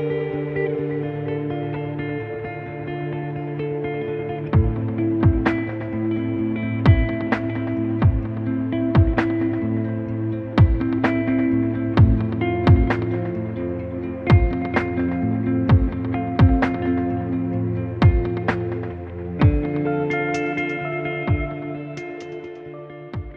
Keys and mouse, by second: 0.0 ctrl+r, 0.5 click, 0.8 click, 0.9 click, 0.9 right click, 1.3 middle click, 1.7 ctrl+r, 2.1 click, 2.1 right click, 3.2 ctrl+r, 3.5 click, 3.6 right click, 4.1 right click, 4.3 ctrl+r, 4.6 g, 5.0 click, 5.0 right click, 5.2 ctrl+r, 5.5 g, 5.6 right click, 6.3 right click, 6.6 click, 6.9 click, 7.0-9.9 typing, 7.1 click, 7.2 right click, 7.3 click, 7.5 right click, 7.7 click, 7.8 right click, 8.0 click, 8.3 click, 8.4 right click, 9.7 click, 9.8 right click, 11.0 click, 11.0 right click, 11.1 g, 11.2 right click, 11.3 g, 11.4 click, 11.5 right click, 11.6 g, 12.1 click, 12.3 ctrl+r, 12.6 middle click, 12.8 g, 13.0 click, 13.0 middle click, 13.1 ctrl+r, 13.4 click, 14.1 click, 14.3 middle click, 14.4 click, 14.5-20.1 typing, 14.8 click, 15.0 middle click, 15.2 middle click, 15.5 click, 15.8 click, 16.3 click, 16.8 ctrl+r, 17.6 click, 17.7 right click, 17.9 click, 18.9 ctrl+r, 20.5 click, 20.5 right click, 20.9-22.4 drag, 20.9 right click, 21.3 g, 21.7 right click, 22.2 right click, 22.5 ctrl+r, 22.6 click, 22.9 right click.